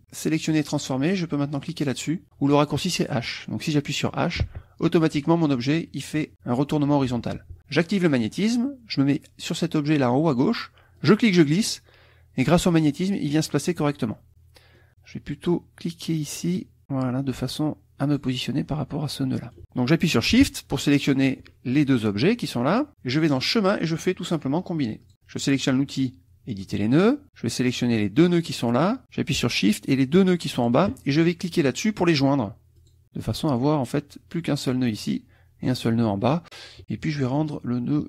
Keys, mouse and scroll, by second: 0.5 click, 4.4 h, 8.1 click, 11.0-12.7 drag, 14.1 click, 16.4-18.3 drag, 19.3 click, 21.1 shift+click, 23.3 click, 25.0 click, 26.7 click, 27.6-28.9 drag, 30.0 shift+click, 32.8 click.